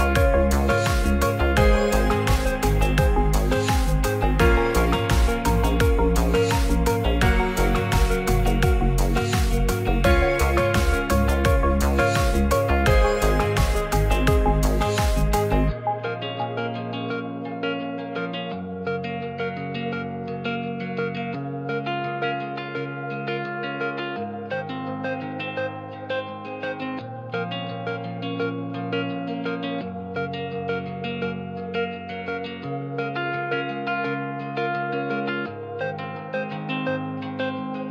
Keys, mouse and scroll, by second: 0.5 c, 1.8 middle click, 2.5 Tab, 2.7 click, 3.0-4.0 middle drag, 4.3 ctrl+s, 5.1 middle click, 5.7 r, 6.4 Tab, 6.9-9.9 typing, 12.8 click, 12.9 Tab, 13.4 middle click, 14.2 click, 14.2 Tab, 14.6 click, 14.9 v, 15.9-18.0 typing, 22.4 g, 22.5 shift+z, 24.1 click, 24.5 middle click, 25.2 middle click, 25.4 Tab, 25.8 click, 26.1-27.0 middle drag, 27.1 middle click, 30.2 middle click, 30.5 shift+middle click, 30.8 shift+a, 32.2 s, 32.4 shift+z, 32.9 click, 33.0 x, 34.0 middle click, 35.4 click.